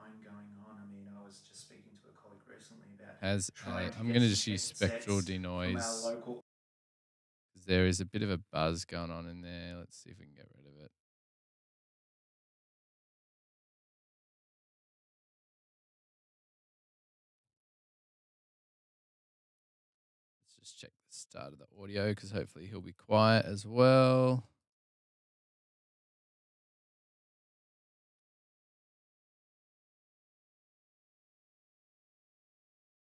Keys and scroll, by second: 29.0 s, 29.6 s.